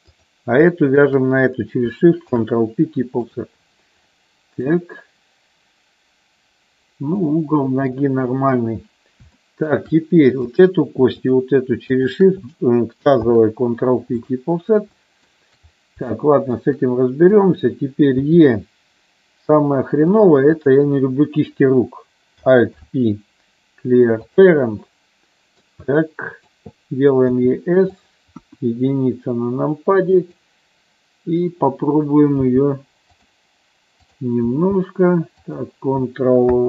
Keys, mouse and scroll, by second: 0.4 click, 1.1 shift+click, 2.4 ctrl+p, 4.2 middle click, 7.5 middle click, 8.7 KP_1, 9.6 shift+middle click, 10.6 click, 11.3 click, 13.4 ctrl+p, 15.1 middle click, 16.2 shift+middle click, 17.6 click, 18.3 e, 22.8 alt+p, 25.1 middle click, 26.1 middle click, 27.4 s, 28.2 click, 28.6 KP_1, 30.3 click, 32.7 g, 33.2 click, 34.3 click, 34.6 g, 35.6 click.